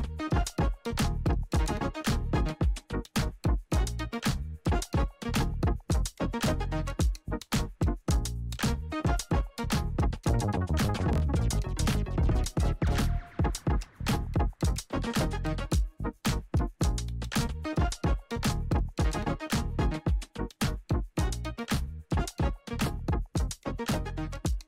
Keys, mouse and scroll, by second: 1.0 ctrl+d, 3.8 click, 5.1-7.7 alt+drag, 12.6 click, 13.8 Return, 15.0-23.3 drag, 23.3 Return.